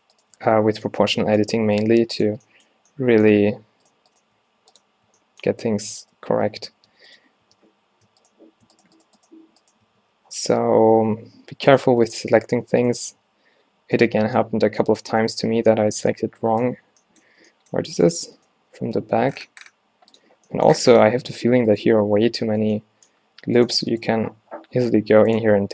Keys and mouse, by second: 0.8 o, 1.6 click, 1.6 g, 2.3 Tab, 3.5 Tab, 4.4 x, 5.2 a, 5.9 Tab, 6.4 Tab, 6.9 Tab, 7.5 Tab, 8.2 a, 10.0-11.0 drag, 10.0 q, 11.0-11.3 ctrl+z, 13.3 w, 14.4 q, 15.2 Tab, 17.4 Tab, 18.8 g, 20.2-20.6 drag, 21.5 middle click, 22.0 alt+x, 24.4 x.